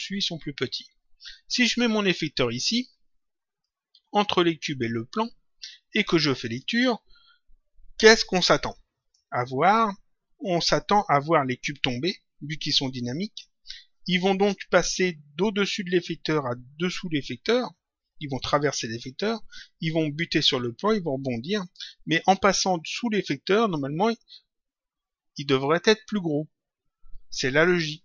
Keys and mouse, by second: 3.5 click, 6.4 click.